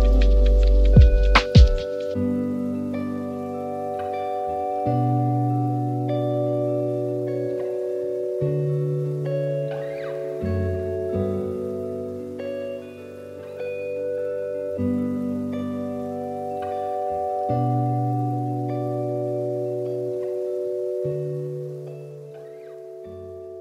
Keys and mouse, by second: 4.2-7.0 drag, 15.3 click, 17.9 middle click, 18.7-19.2 drag, 20.6-23.6 drag.